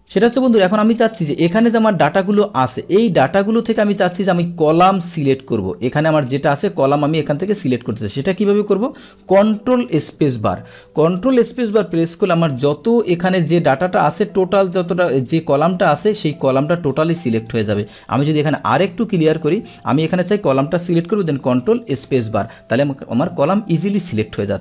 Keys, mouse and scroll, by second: 2.2 click, 3.7 click, 4.7 click, 5.2 click, 7.5 click, 10.0 ctrl+space, 14.7-17.6 drag, 18.1 Right, 18.3 Right, 18.7 Right, 21.8 ctrl+space.